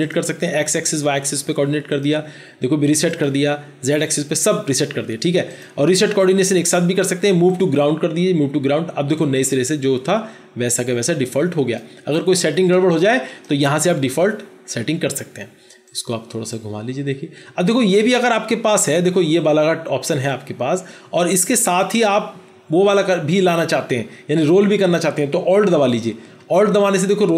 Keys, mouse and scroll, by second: 26.7 alt+click.